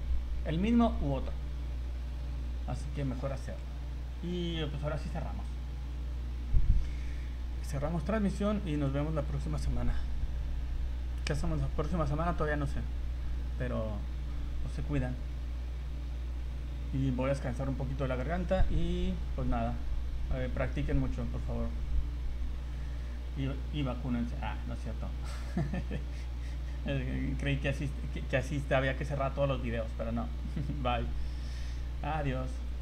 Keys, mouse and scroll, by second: 2.7 click, 3.9 scroll down 2.